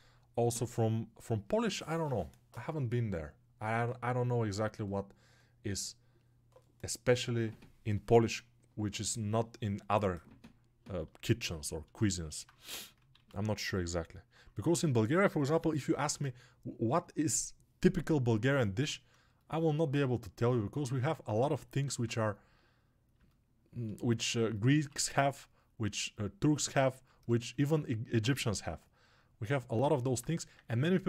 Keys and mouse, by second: 27.0-31.0 alt+shift+right drag, 30.4 1.